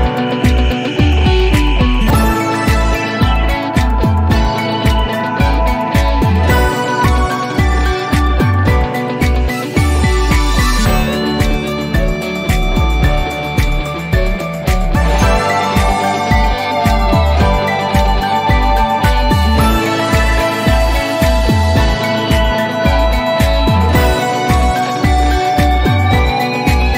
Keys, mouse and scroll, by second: 1.5 click, 3.3-4.3 typing, 5.6 click, 7.3-7.8 drag, 8.9 typing, 10.0 Return, 12.5-13.2 drag, 13.7 t, 15.0 scroll down 1, 16.0-19.0 drag, 19.4-20.8 scroll up 1, 23.3 p, 24.6-26.9 alt+middle click.